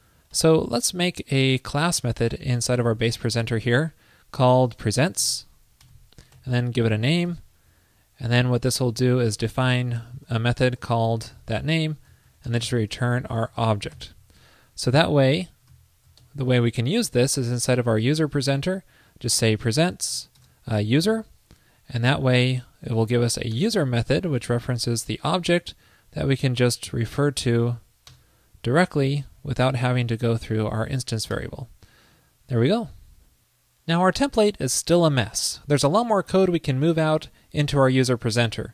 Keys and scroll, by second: 0.4 alt+super+Right, 14.5 super+Right, 15.8 super+s, 16.3 alt+super+Left, 22.9 alt+Right, 26.8 alt+Left, 29.5 super+Right, 30.4 alt+Left, 32.0 super+Left, 33.0 super+s.